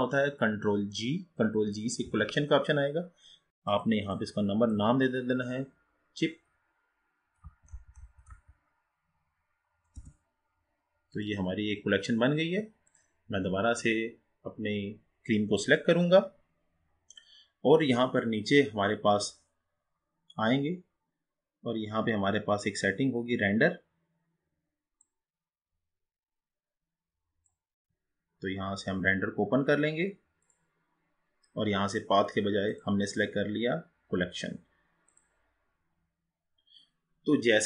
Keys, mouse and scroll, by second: 2.3 ctrl+g, 3.7-6.8 drag, 11.1 click, 13.3 click, 18.1-21.8 scroll down 6, 25.1-28.7 drag, 30.5-35.9 drag.